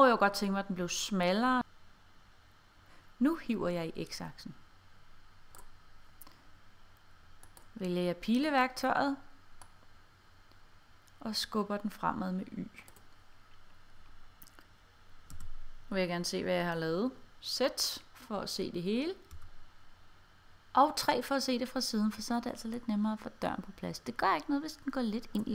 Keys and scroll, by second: 19.4 3.